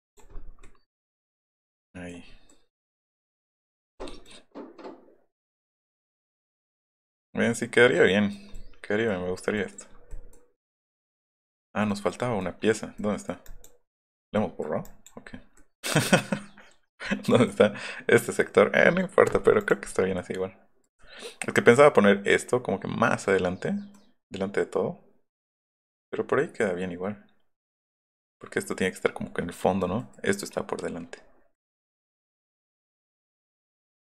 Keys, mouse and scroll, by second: 0.1 click, 0.3-1.1 scroll up 2, 2.1 middle click, 2.3 scroll up 1, 2.4 middle click, 3.1 scroll up 1, 3.3 middle drag, 3.8 middle click, 5.9 middle click, 7.3 middle click, 8.3 middle click, 8.8 middle click, 9.6 middle click, 9.9 scroll down 1, 10.1 middle click, 10.6-10.9 scroll up 4, 11.2 click, 11.9 middle click, 12.3 middle click, 12.6 middle click, 13.0 middle click, 13.5 click, 14.0 middle click, 14.2 middle click, 14.9 click, 15.6 middle click, 17.3 middle click, 19.6 click, 20.2 middle click, 23.9 middle click, 28.2 middle click, 30.0 middle click, 31.2 middle click, 31.3 scroll down 1, 31.6-33.6 middle drag, 33.8 scroll up 1.